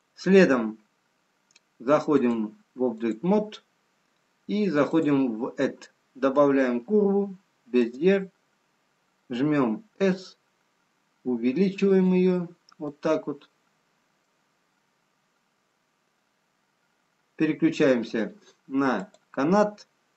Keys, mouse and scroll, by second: 2.1 click, 4.9 click, 11.4 s, 12.9 middle click, 15.8-16.7 scroll down 2, 19.4 click.